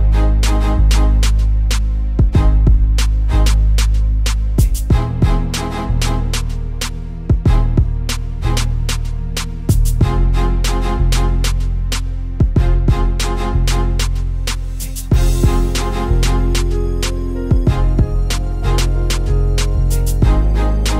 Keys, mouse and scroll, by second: 0.7 click, 1.2 Tab, 1.6 click, 3.8 a, 5.8 click, 6.6 click, 7.0-7.6 scroll up 3, 7.6 click, 9.1 shift+d, 10.8 click, 11.6 click, 12.7 click, 13.9 click, 15.5 KP_1, 16.0 r, 17.1 click, 19.1 click, 20.4-20.9 scroll down 8.